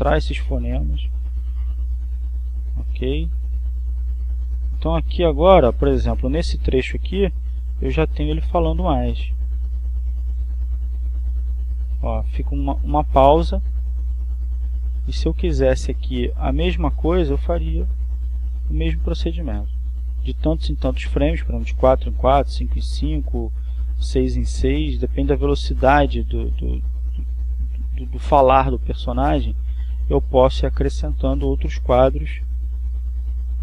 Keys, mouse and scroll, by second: 1.4-3.4 drag, 3.7 click, 4.6 click, 6.6-17.4 drag, 17.9 click, 19.2-20.7 drag, 21.3 click, 23.1-24.9 drag, 26.6-29.6 drag, 30.1-31.1 drag, 31.7-33.6 drag.